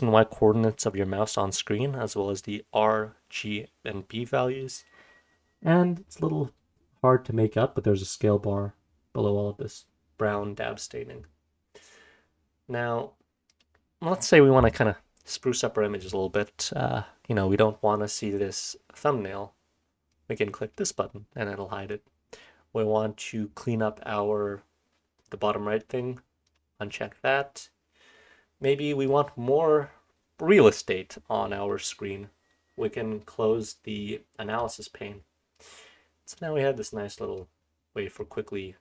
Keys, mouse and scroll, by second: 20.1 click, 26.4 click, 29.0-31.6 drag, 34.6 click, 35.5-37.3 drag, 37.7-38.8 scroll down 1, 38.1-38.8 drag.